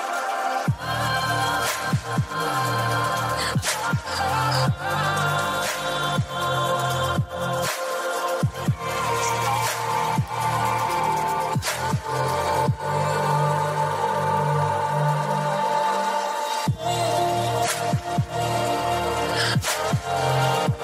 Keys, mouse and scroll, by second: 0.2 click, 3.1 click, 5.1 KP_1, 6.7 KP_1, 12.7 click, 15.6 click, 18.0 g.